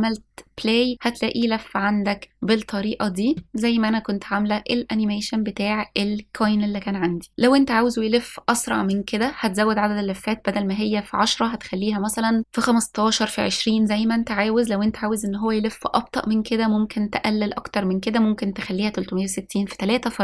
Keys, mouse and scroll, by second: 1.0 space, 4.8 space, 10.5-10.9 drag.